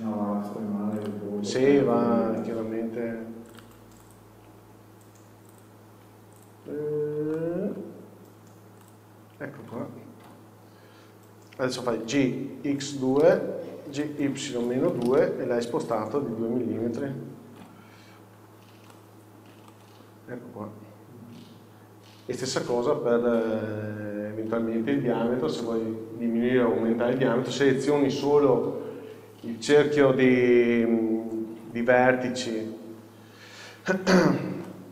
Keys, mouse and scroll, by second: 0.2-1.1 scroll up 1, 1.1 alt+click, 2.2-2.8 scroll down 1, 2.8 scroll up 1, 3.7 alt+click, 4.8 scroll down 1, 5.7 shift+click, 6.9 scroll up 1, 7.5 alt+middle click, 9.0 alt+click, 9.7 scroll down 1, 10.4 KP_7, 11.2 scroll down 1, 16.4 Tab, 16.7 scroll down 1, 17.8 z, 17.8 KP_6, 18.4 scroll down 1, 19.0-20.2 middle drag, 20.4 scroll down 1, 23.0 middle click, 24.3-27.8 scroll up 1, 30.5 KP_7, 31.8 z, 31.9 KP_4, 32.6 scroll up 1, 33.2 scroll up 1, 34.2 a, 34.4 scroll up 1, 34.8 shift+middle click.